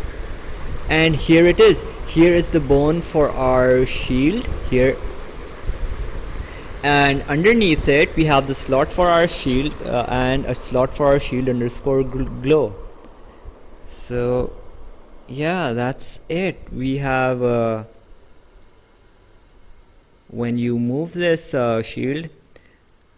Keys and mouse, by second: 12.1 click, 14.8 click, 17.0 click, 18.7 click.